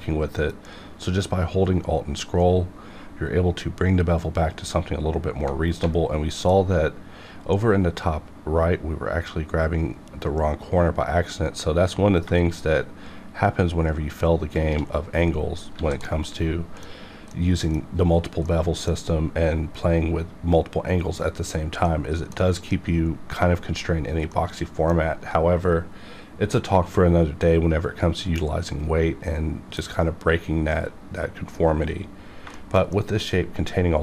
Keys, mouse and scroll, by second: 1.0 alt+Num_Lock, 1.0-3.1 alt+scroll down 1, 4.5-5.1 alt+scroll up 1, 6.3 alt+scroll down 1, 6.8 alt+scroll up 1, 8.2-8.9 alt+scroll down 1, 9.0-10.2 alt+scroll up 1, 10.2 alt+scroll down 1, 10.6 alt+scroll up 1, 14.5 shift+click, 15.1-15.4 scroll down 1, 15.7 alt+a, 16.0 middle click, 17.3 middle click, 18.0-18.4 scroll up 2, 18.4-21.3 middle drag, 21.8 middle click, 22.3-24.3 scroll down 2, 24.4-27.1 middle drag, 32.5 shift+middle click, 32.9 middle click.